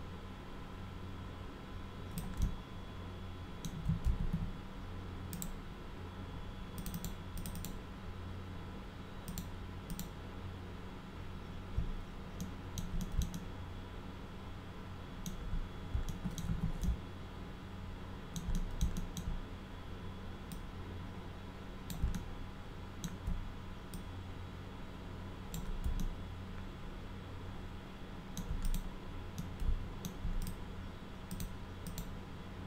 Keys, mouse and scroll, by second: 2.4-3.6 alt+middle drag, 4.1 ctrl+z, 6.8 click, 6.9 click, 7.3 click, 7.5 click, 9.2 click, 9.8 click, 12.4 alt+middle click, 13.0 alt+middle click, 13.3-15.2 alt+middle drag, 15.4-15.8 scroll up 2, 16.0 alt+middle click, 16.4 w, 16.8-18.3 alt+middle drag, 18.5 middle drag, 18.9 alt+middle click, 20.5-21.8 drag, 22.1 alt+middle click, 23.9-25.5 drag, 26.0-28.3 alt+middle drag, 28.6 click, 29.3 middle click, 30.4 click, 31.3 click, 31.8 click.